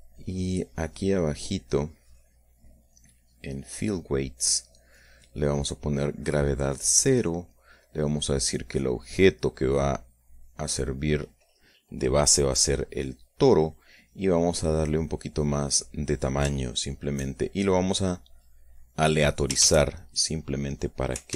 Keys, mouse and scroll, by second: 0.0 click, 0.4-1.6 drag, 2.2 click, 4.0 click, 5.2 click, 5.8 middle click, 6.4-7.4 drag, 8.4 click, 9.2 click, 10.6 click, 14.9 click, 16.0 click, 18.6 click, 20.1 shift+a.